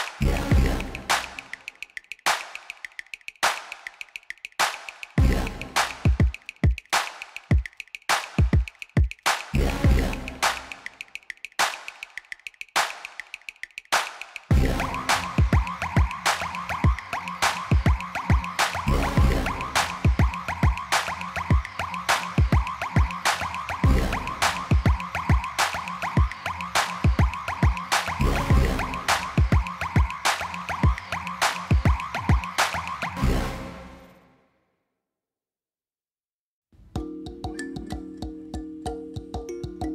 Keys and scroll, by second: 3.0 g, 3.8 z, 8.6 s, 9.2 x, 11.1 alt+a, 19.8 Tab, 20.6 alt+a, 24.7 Tab, 25.4 a, 25.9 s, 26.6 y, 30.6 Tab, 31.1 alt+a.